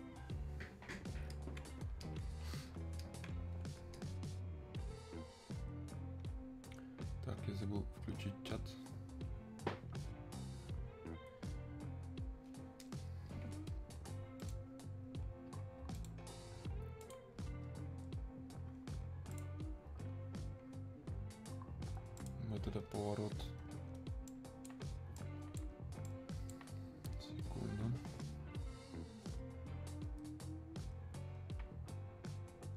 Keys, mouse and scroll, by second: 2.1-4.0 alt+drag, 8.3 click, 11.2 super+Num_Lock, 11.2 click, 19.4 click, 22.2-29.0 drag.